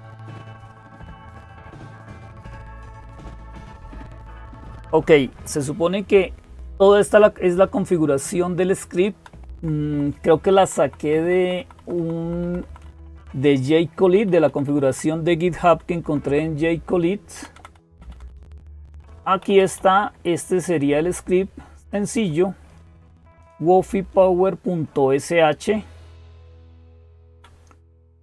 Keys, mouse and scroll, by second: 0.0-28.2 typing, 4.0-6.7 drag, 8.8 Down, 9.3 Down, 9.6 Down, 9.9 Down, 10.1 Down, 10.6 Down, 10.6 Down, 10.8 Down, 11.0 Down, 11.2 Down, 11.4 Down, 11.6 Down, 12.0 Down, 12.2 Down, 12.7 Down, 12.9 Down, 13.8 Down, 14.1 Down, 14.3 Down, 14.5 Down, 15.4 Down, 15.6 Down, 16.1 Down, 17.2 Down, 17.4 Down, 17.5 Down, 17.7 Down, 17.9 Down, 18.3 Down, 18.5 Down, 18.8 Down, 19.2 Up, 19.4 Up, 19.6-22.0 Up, 24.7 Down, 25.3 Down, 25.4 Down, 25.5 Down, 25.7 Down, 25.9-26.2 Down, 26.4 Down, 26.5 Down, 26.7-27.2 Down.